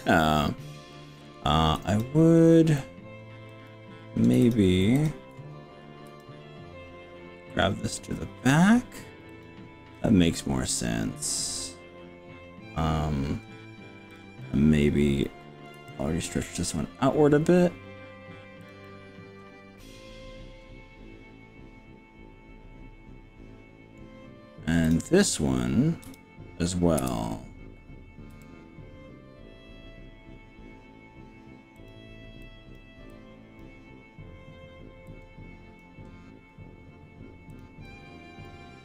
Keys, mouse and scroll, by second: 0.3-0.9 scroll up 4, 0.9 middle click, 1.1 click, 1.9 click, 3.5 click, 4.5 shift+click, 6.1 g, 9.3 click, 9.9-13.5 middle drag, 14.1 click, 14.4-15.7 middle drag, 15.8 g, 18.7 click, 18.8 middle click, 19.4-24.0 middle drag, 24.9 click, 26.1 KP_3, 27.0 KP_3, 27.0 KP_1, 28.3 g, 31.9 click, 32.5 click, 33.1 click, 35.1 click, 37.5 click, 37.9 click.